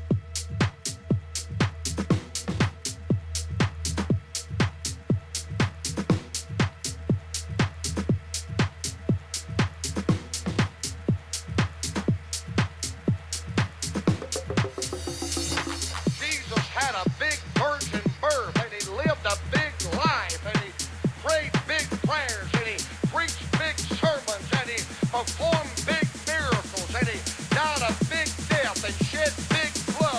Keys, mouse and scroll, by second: 20.4-23.2 drag, 22.6-26.0 middle drag.